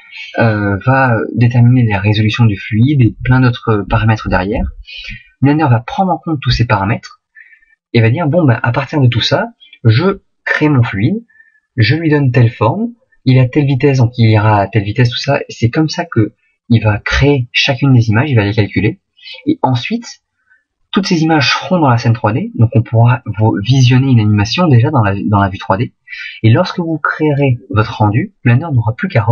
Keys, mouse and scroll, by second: 23.4 click, 25.7 click.